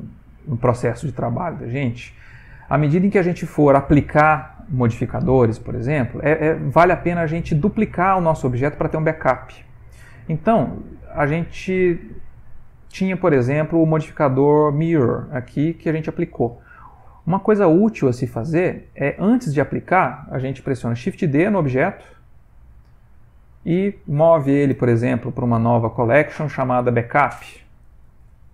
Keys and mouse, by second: 0.1 middle click, 0.4 middle click, 0.5 middle click, 0.6 middle click, 3.0 middle click, 11.4 middle click, 11.9 middle click, 12.7 middle click, 15.1 middle click, 16.4 middle click, 18.2 middle click, 22.2 shift+d, 24.8 m.